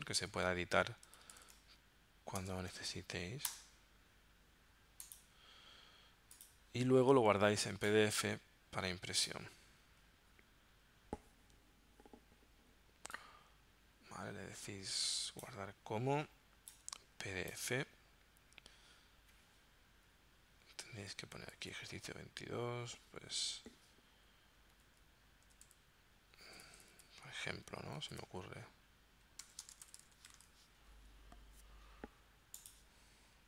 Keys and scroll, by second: 0.0-2.6 typing, 3.5 Return, 20.7 Right, 21.4 shift+-, 24.8 1, 25.5 0, 26.6 p, 28.0 shift+-, 29.5-30.8 typing.